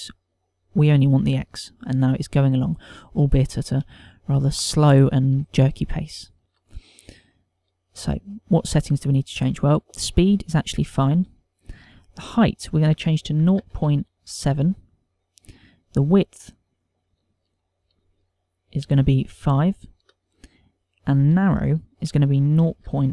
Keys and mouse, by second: 1.3 click, 3.8 middle click, 5.3 shift+middle click, 5.9 ctrl+middle click, 12.6 ctrl+click, 16.8 click, 18.0 ctrl+click, 18.8 ctrl+click, 22.0 ctrl+click.